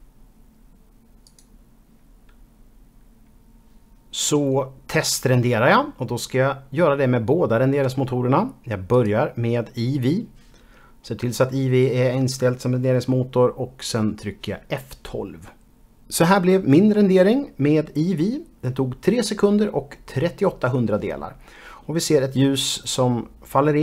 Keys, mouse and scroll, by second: 1.3 click, 9.0 click, 15.9 F12.